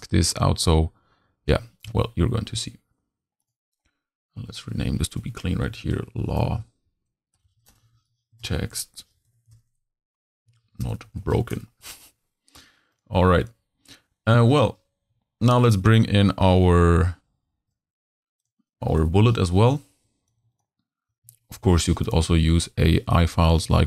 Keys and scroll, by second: 5.3 shift+l, 5.8 shift+a, 6.1 shift+w, 7.3 BackSpace, 7.6 shift+w, 7.8 shift+t, 7.9 shift+e, 9.0 BackSpace, 9.3 x, 11.0 b, 11.1 k, 11.2 e, 18.8 z, 19.4 h, 20.4 v, 21.5 super+c.